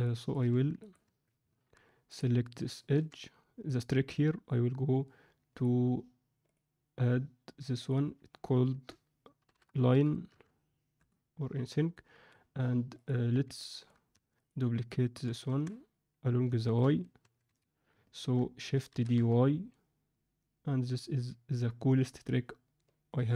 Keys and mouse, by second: 0.0 middle click, 0.4 Tab, 0.8 click, 1.4 alt+Tab, 2.0 click, 2.9 2, 5.5-11.8 drag, 13.5 middle click, 14.1 Tab, 14.3 click, 15.1 KP_3, 15.4 Tab, 16.5 ctrl+middle click, 17.2 Tab, 17.4 z, 18.8 shift+d.